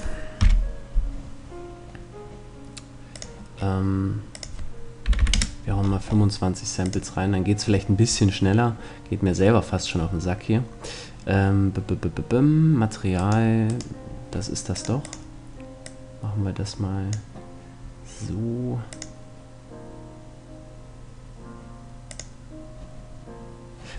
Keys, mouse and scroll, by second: 0.0 F11, 2.7-5.8 drag, 5.8 middle click, 6.5-8.2 drag, 9.5-12.3 middle drag, 12.9-15.1 right drag, 14.3-16.5 drag, 18.5-20.3 drag, 21.7-23.6 drag.